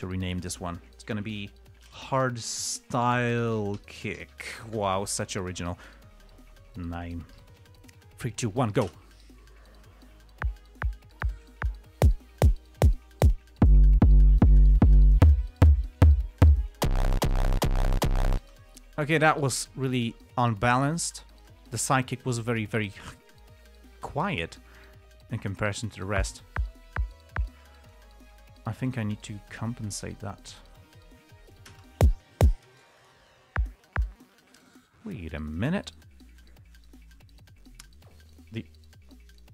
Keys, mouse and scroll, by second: 1.9-5.2 typing, 7.7 Home, 9.2 space, 18.7 space, 20.8 click, 21.7 click, 22.5 click, 23.2 click, 26.5 space, 26.8 click, 27.8 space, 32.0 space, 33.0 space, 33.3 click, 34.6 space, 34.9 click, 35.8 click, 38.6 click.